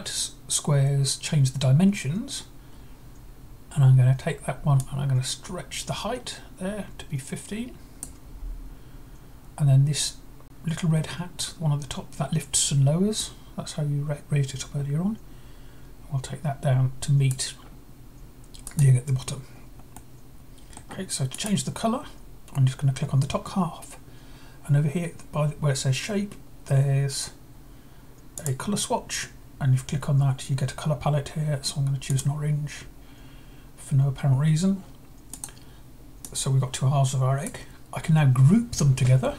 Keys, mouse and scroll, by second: 4.6-7.8 drag, 13.0-17.1 drag, 18.4-19.5 drag, 19.7-20.8 middle drag, 21.1 click, 28.2-29.2 drag, 31.9-32.9 drag, 35.1-37.3 drag.